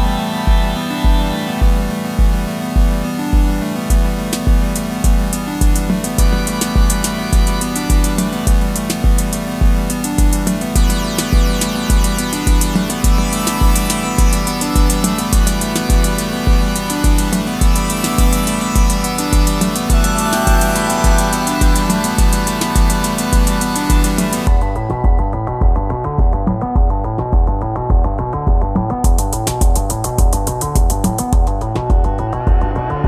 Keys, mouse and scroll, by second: 1.9-2.2 typing, 2.5 double click, 8.4-9.0 typing, 8.9 double click, 9.3 double click, 15.6 [, 15.9 [, 16.3 double click, 24.2 right click, 25.6 [, 25.9 [, 26.2 double click.